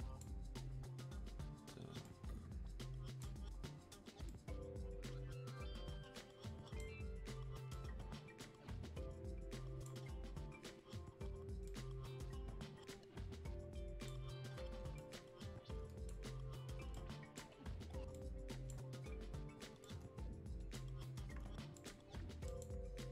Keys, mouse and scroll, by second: 2.0-4.3 drag, 4.3-7.7 drag, 7.7-11.7 drag, 11.7-15.0 drag, 15.0-16.3 drag, 16.3-16.9 scroll down 1, 16.9 click, 17.7 scroll up 1, 18.1 click, 19.0 scroll down 1, 19.4-19.8 scroll up 1, 19.8-21.8 drag, 21.8 click.